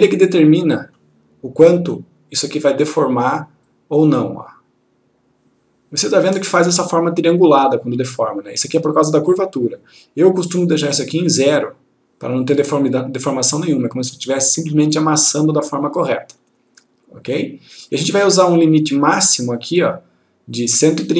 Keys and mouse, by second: 0.3-1.3 click, 10.8-12.3 click.